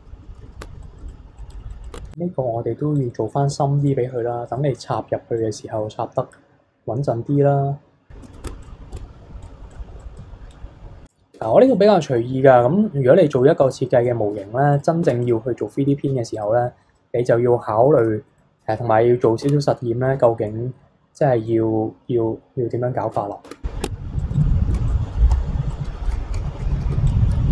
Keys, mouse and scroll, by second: 0.0 a, 0.2 middle drag, 0.4 KP_3, 0.6 Tab, 0.8 drag, 1.1 click, 1.5 click, 1.7 click, 1.9 Tab, 2.9 click, 3.5 b, 5.3 click, 8.5 Tab, 8.6 click, 8.9 Tab, 9.2 b, 9.7 click, 9.9 b, 10.5 click, 11.3 Tab, 11.8 scroll down 2, 12.1-14.3 middle drag, 14.3 Tab, 14.7 click, 15.0 Tab, 15.2 click, 15.5-16.2 scroll up 5, 16.2 scroll up 1, 16.3 click, 16.9-17.9 middle drag, 17.9 KP_1, 18.3 shift+middle click, 18.8-19.4 scroll down 3, 19.4 Tab, 20.1 b, 21.4 click, 23.5 Tab, 23.8 Tab, 24.2 click, 24.3 b, 24.7 shift+d, 26.3 ctrl+z, 26.7 s.